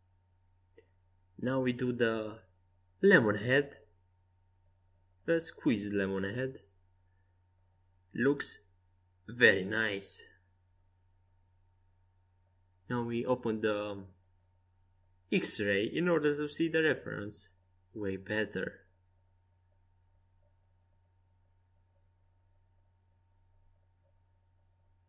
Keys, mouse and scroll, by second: 2.5 s, 6.3 Tab, 8.1 middle click, 11.4 right click, 11.7 z, 22.8 n.